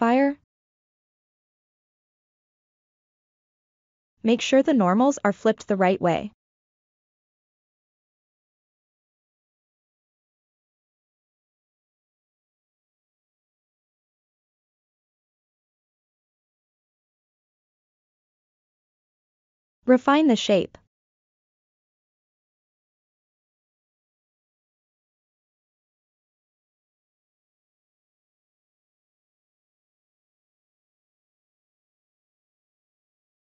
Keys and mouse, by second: 2.1-2.4 ctrl+middle drag, 5.0 F5, 7.0 click, 7.8 F5, 9.0-9.5 ctrl+middle drag, 10.2 shift+middle click, 12.8 ctrl+1, 14.0 shift+middle drag, 14.3 shift+click, 14.6-15.0 ctrl+middle drag, 15.0 ctrl+click, 15.9 Tab, 17.7-18.4 drag, 18.9-20.6 drag, 21.5 click, 22.0 click, 25.2 ctrl+r, 27.0 ctrl+r, 28.5 click, 32.8 ctrl+r.